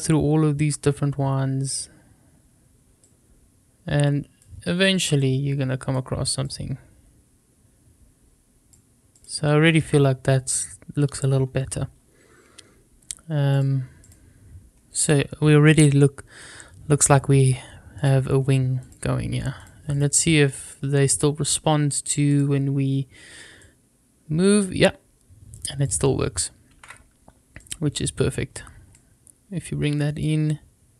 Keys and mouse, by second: 3.0-4.4 drag, 5.2 click, 6.4-8.7 drag, 9.1 click, 9.7-11.3 middle drag, 13.5 click, 14.0 click, 17.3 click, 17.9 click, 18.8 click, 19.9 click, 20.6 click, 21.1 middle click, 23.5-25.8 drag, 26.7 ctrl+z, 27.6 click, 28.9-30.2 drag.